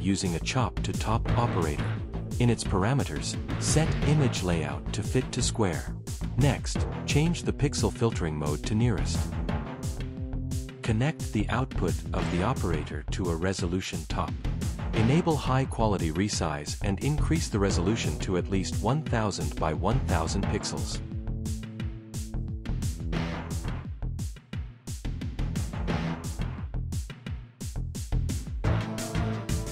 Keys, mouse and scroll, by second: 10.5 right click, 11.4 r, 12.0 s, 13.0 click, 13.2 click, 14.1 click, 19.6 BackSpace, 20.1 1, 20.9 Return, 21.1 Return, 21.7 click, 22.0 click, 22.3 BackSpace, 22.8 1, 23.3 0, 23.8 Return, 25.5 click, 26.9 click, 27.5 click.